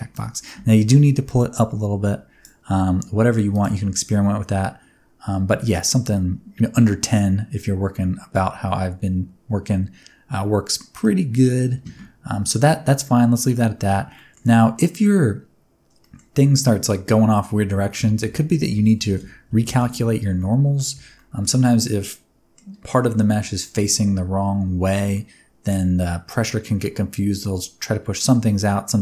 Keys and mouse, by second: 0.1-2.4 drag, 3.5 click, 3.8 space, 6.2-8.4 middle drag, 8.7-10.9 middle drag, 11.1 middle click, 11.7 space, 14.1 middle click, 14.7 middle click, 16.0 middle drag, 17.9 Tab, 18.2 a, 19.1 shift+n, 19.5 Tab, 19.6 space, 20.5 middle click, 21.0 space, 21.1 middle click, 21.8 middle click, 25.1 middle click.